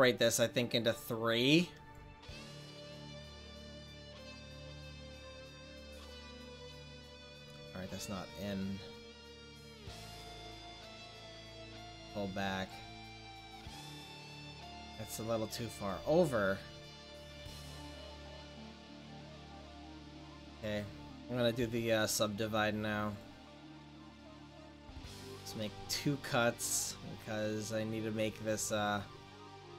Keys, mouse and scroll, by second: 0.7-2.3 middle drag, 2.0-4.0 drag, 4.0 right click, 4.3-5.8 drag, 5.9 click, 9.4-13.1 drag, 13.7 middle click, 16.2-19.2 middle drag, 19.2 click, 20.6-21.6 right drag, 21.6 w, 24.8-25.9 drag, 25.9-27.3 middle drag, 28.8-29.7 right drag.